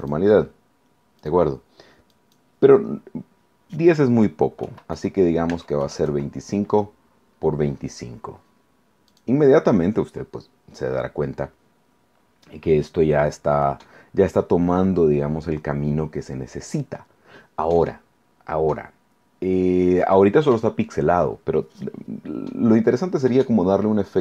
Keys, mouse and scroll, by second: 0.0 click, 1.2 click, 2.1 click, 4.6 2, 5.0 5, 5.5 Tab, 5.8 KP_2, 6.0 KP_5, 9.1 click.